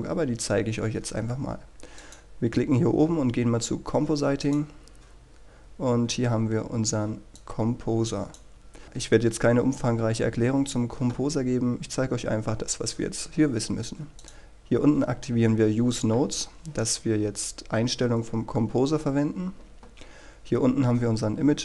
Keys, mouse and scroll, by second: 2.0-21.6 drag.